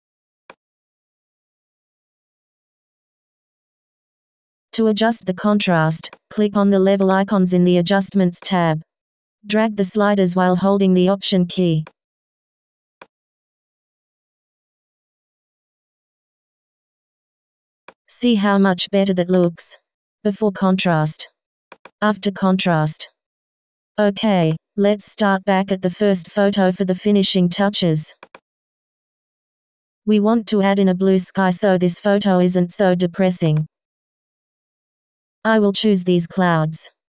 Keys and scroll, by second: 2.7 Return.